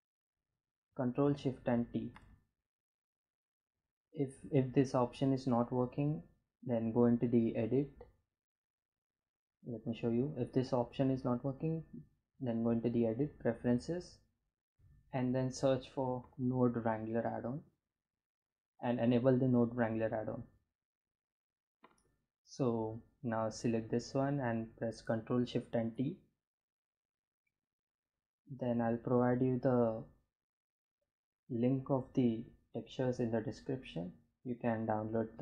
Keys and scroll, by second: 0.8 ctrl+shift+t, 16.6 n, 16.7 o, 16.8 d, 16.9 e, 24.7 ctrl+shift+t.